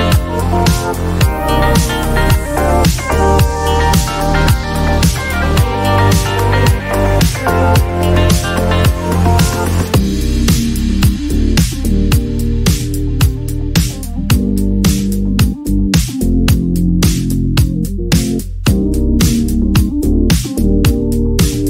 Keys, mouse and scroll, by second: 0.3 click, 1.7 click, 2.1 click, 2.7 click, 2.8 click, 3.1-6.1 typing, 6.7 click, 8.0 click, 8.1 click, 9.0-11.0 typing, 11.3 Return, 13.2 click, 15.2-15.7 typing, 16.3 click, 18.7 click, 21.0 click.